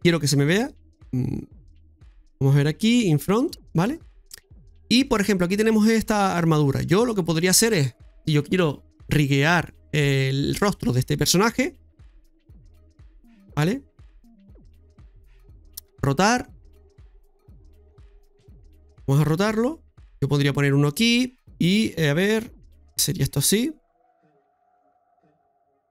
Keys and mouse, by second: 3.4 click, 4.0 middle click, 5.0 shift+middle click, 6.4 shift+middle click, 12.0 KP_3, 12.3 KP_1, 12.8 KP_1, 13.0 KP_3, 14.7 right click, 15.9 r, 17.3 ctrl+z.